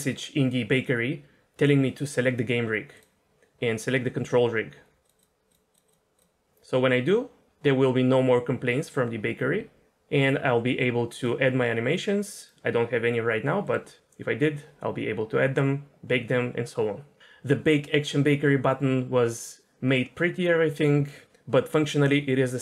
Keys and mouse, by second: 5.2-5.5 drag, 5.9 click, 11.3-13.6 drag.